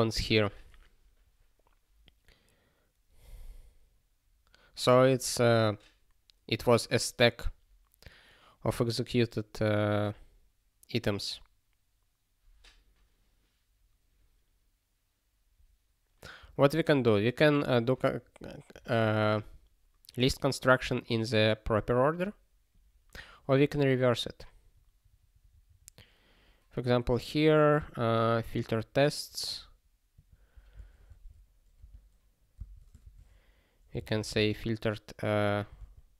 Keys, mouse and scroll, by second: 17.4 click, 19.0 click, 20.4 click, 21.8 click, 24.5 scroll down 1, 26.9 click, 30.1 click, 31.0 ctrl+f, 31.8 ctrl+f, 32.6 Return, 33.0 (, 34.5 alt+/.